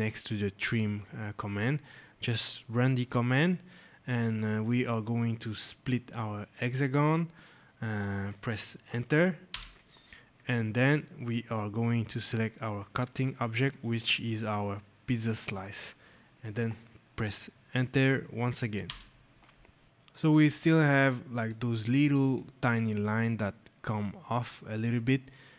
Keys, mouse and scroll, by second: 2.8 click, 6.5 click, 9.4 Return, 13.6 click, 18.7 Return, 19.8 click, 21.3 click, 22.2 click, 22.6 scroll, 24.3 right click, 24.4 scroll, 25.0 scroll.